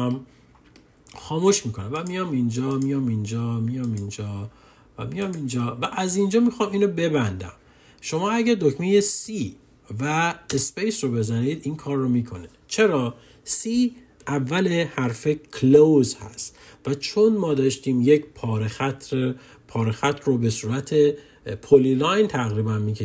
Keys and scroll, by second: 8.9 c, 10.1 space.